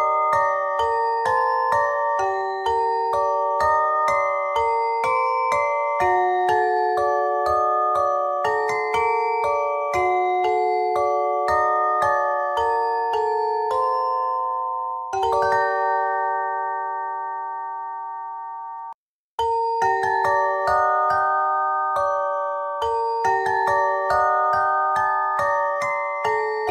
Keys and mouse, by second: 0.8 e, 1.9 s, 3.0 click, 3.4 s, 7.0 ctrl+Tab, 9.7 z, 10.3 KP_2, 11.3 KP_1, 12.9 ctrl+Tab, 13.9 z, 14.2 c, 15.4-16.4 drag, 18.4 z, 19.3 ctrl+Tab, 20.5 click, 21.2 w, 23.2 x, 24.1 ctrl+Tab.